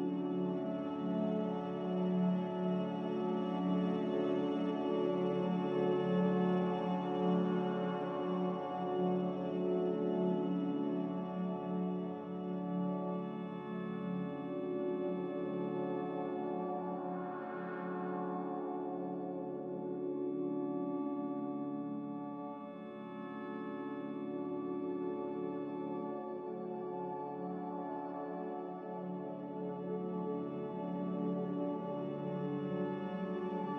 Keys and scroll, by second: 6.0 z, 20.9 ctrl+z, 21.6 c.